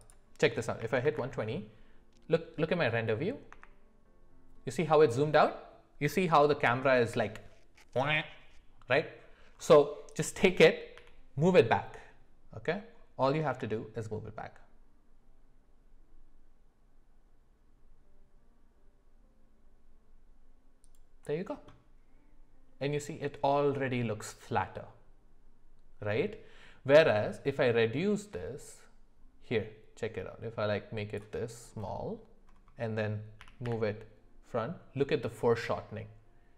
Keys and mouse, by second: 0.1-5.9 drag, 10.9 g, 27.4-31.3 drag, 33.4 g.